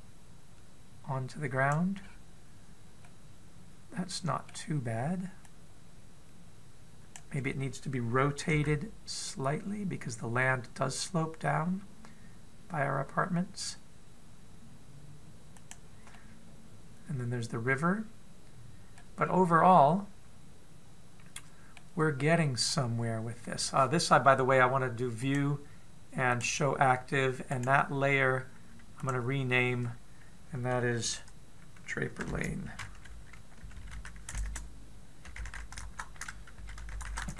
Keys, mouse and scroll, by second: 2.8-3.8 scroll up 2, 3.8 scroll up 1, 3.8 middle click, 6.3 click, 9.4 r, 16.9 middle click, 20.0-20.4 scroll down 4, 20.5 middle click, 23.0-23.9 scroll up 7, 26.0 click, 28.3 right click, 35.3 BackSpace.